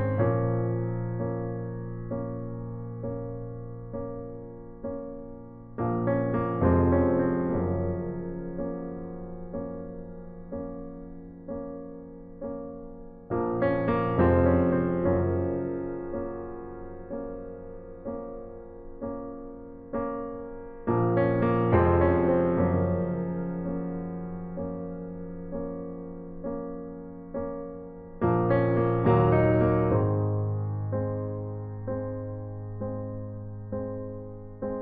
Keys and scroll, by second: 0.0-2.1 typing, 3.5-4.5 typing, 9.7-10.5 typing, 11.6-12.3 typing, 14.8 space, 17.1 typing, 18.1 ctrl+alt+z, 19.5-23.4 typing, 27.1 space, 27.8 space, 30.8-32.8 typing.